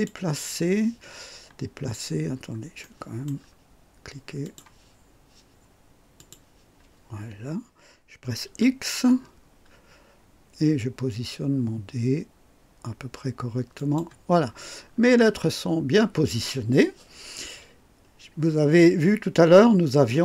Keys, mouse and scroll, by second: 1.9-2.6 scroll down 2, 2.8 right click, 4.4 click, 6.2 click, 8.5 x, 9.2-9.9 scroll up 2, 13.8 click, 14.4-15.1 scroll down 2.